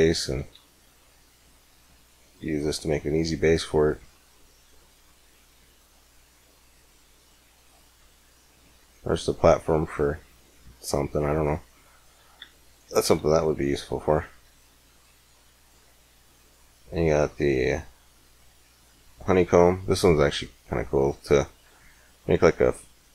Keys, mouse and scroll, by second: 1.5-3.6 drag, 5.6 click, 8.1 middle click, 10.1-11.4 middle drag, 12.2 x, 12.6-14.6 drag, 13.0 shift+a, 19.9-20.9 scroll up 1, 22.1-23.1 drag.